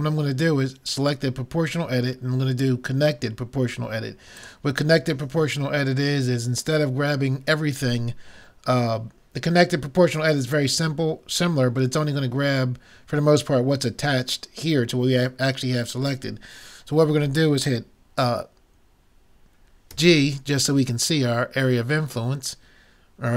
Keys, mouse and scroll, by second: 0.9-2.8 drag, 19.9 g.